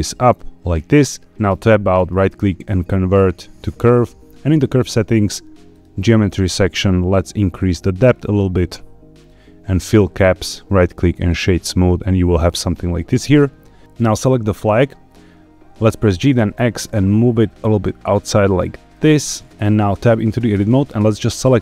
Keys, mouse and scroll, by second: 0.2 click, 1.3 Tab, 1.3 right click, 1.4 Tab, 1.9-3.5 right drag, 4.6 click, 5.6 click, 6.0 scroll down 2, 7.1-9.2 shift+drag, 9.8 click, 10.3-11.2 right drag, 11.4 scroll up 3, 12.6 scroll down 2, 13.8 shift+middle click, 14.0 click, 14.5-15.1 scroll up 4, 16.0 g, 16.2 x, 18.8 shift+click, 19.2-19.9 scroll down 1, 19.9 Tab, 20.8 scroll up 2, 21.2 shift+middle click.